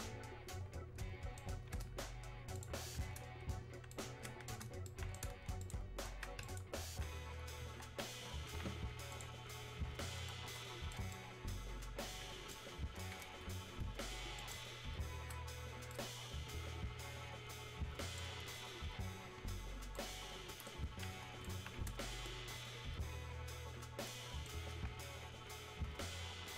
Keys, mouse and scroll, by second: 2.5 ctrl+shift+click, 3.9 shift+right click, 5.6 click, 6.4 click, 9.1 click, 10.3-14.4 alt+right drag, 14.4 ctrl+shift+click, 15.9-26.5 shift+right drag.